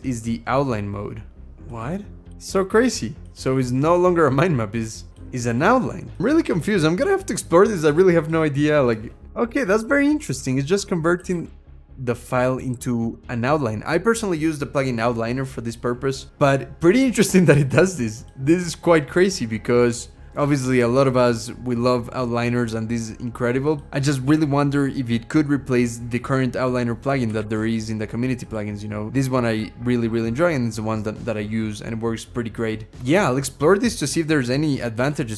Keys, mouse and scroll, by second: 0.2-0.8 scroll down 2, 0.8-1.3 scroll up 4, 3.5-4.5 scroll down 5, 4.5-5.6 scroll down 4, 6.3-7.1 scroll up 2, 7.1-8.7 scroll up 2, 8.7 Return, 9.2-13.0 typing, 9.6 shift+Tab, 10.6 shift+Tab, 16.2 shift+Tab, 17.5 scroll up 2, 19.0-20.3 scroll down 4, 20.3-21.1 scroll up 5, 21.2-21.6 scroll up 4, 21.7-22.5 scroll up 2, 22.5-23.9 scroll down 1, 23.9 Return, 27.2 ctrl+,, 29.1-30.3 scroll down 5, 34.8 BackSpace.